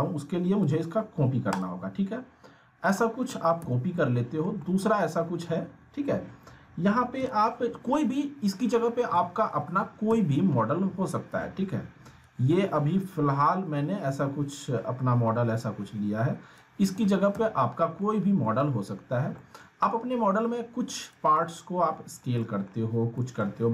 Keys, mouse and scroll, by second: 3.9-4.6 alt+middle click, 4.4 scroll down 1, 4.6 alt+middle click, 7.2 click, 9.1 alt+middle click, 9.6 alt+w, 10.1 z, 11.3-12.2 click, 12.5-13.8 scroll down 1, 15.0 scroll up 1, 15.5-16.8 click, 16.8 alt+w, 17.3 z, 17.8 scroll down 1, 18.0-18.6 alt+middle click, 18.6 r, 19.4 alt+middle click, 20.1-21.3 drag, 21.4-22.3 alt+middle click, 23.1 alt+middle click.